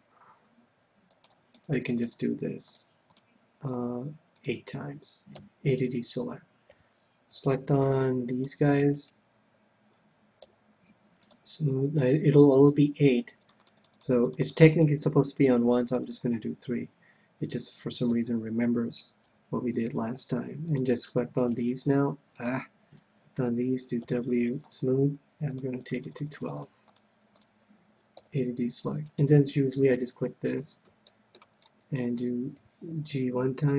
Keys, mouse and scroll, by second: 1.1-6.1 drag, 5.3 a, 6.7 c, 9.0-10.8 right drag, 10.4 w, 13.4-17.9 drag, 18.0 a, 19.3 c, 21.4-23.3 right drag, 24.0 w, 25.5-28.9 drag, 28.2 a, 28.9-30.5 right drag, 29.8 KP_3, 31.0-33.5 middle drag, 32.5 g.